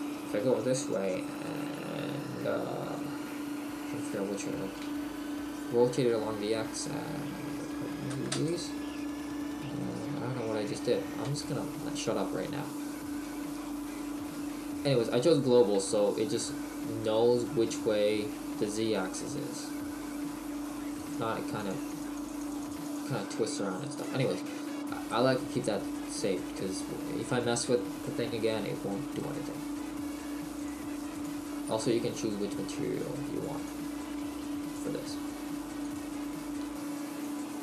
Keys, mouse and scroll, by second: 11.3 ctrl+z, 14.3 right click, 16.5 middle click, 21.0 click, 21.7-37.6 click.